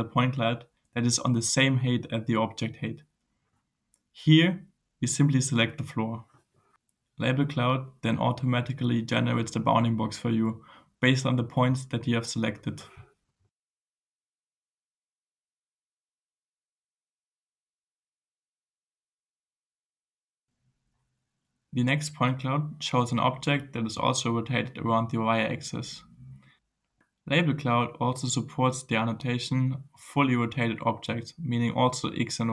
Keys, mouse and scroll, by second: 6.1 click, 13.3 scroll down 2, 15.2 scroll down 2, 17.4 scroll down 2, 20.9 click, 29.2-30.8 drag, 31.0-31.7 scroll up 2.